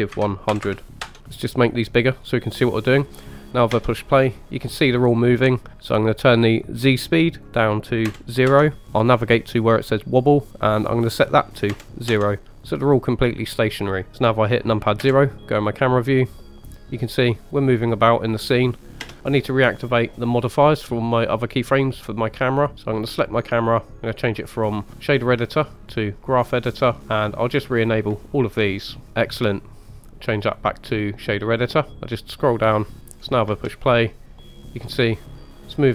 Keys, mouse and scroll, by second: 0.6 KP_0, 1.2-1.5 scroll down 5, 1.5-3.5 drag, 3.8 space, 7.7 click, 10.2-12.1 drag, 15.0 KP_0, 19.2 click, 21.7 click, 23.3 click, 24.2-26.0 drag, 27.0 click, 27.6 drag, 29.1 click, 30.4-31.7 drag, 33.2 scroll up 1, 33.5 space.